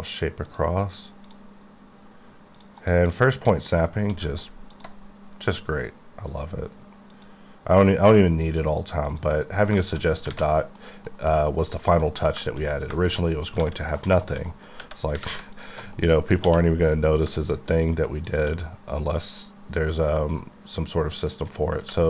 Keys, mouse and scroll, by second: 0.5 click, 1.3 click, 2.8 double click, 3.1 click, 3.8-4.1 scroll down 1, 4.1 q, 4.7 alt+click, 7.1 click, 8.8 double click, 9.1 click, 9.5 scroll down 2, 9.8 shift+middle click, 10.1 scroll down 1, 10.3 alt+a, 10.8-11.3 scroll down 2, 11.1 middle click, 11.6 middle click, 13.1 shift+middle click, 13.6 alt+a, 14.0 click, 14.4 shift+scroll down 2, 14.6 middle click, 14.7 scroll up 1, 15.2 3, 15.6 alt+click, 15.9 middle click, 16.5 q, 18.3 click, 21.3 click, 21.8 q.